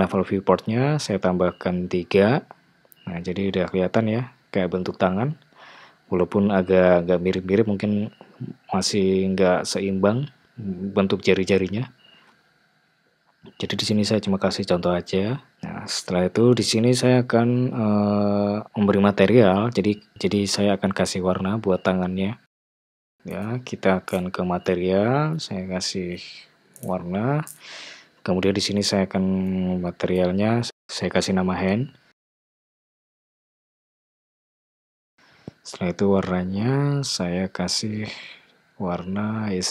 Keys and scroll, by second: 9.9 Tab, 17.4 Tab, 30.5-31.6 typing, 33.2 super+a, 33.7-35.0 typing.